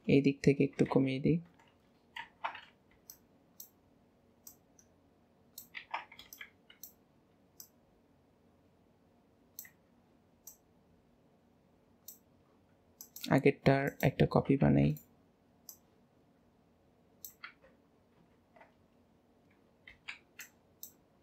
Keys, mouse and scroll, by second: 4.5 click, 5.8 alt+a, 7.6 click, 10.4 click, 13.0 click, 13.8 click, 14.6 shift+d, 15.6 click, 18.4 alt+a.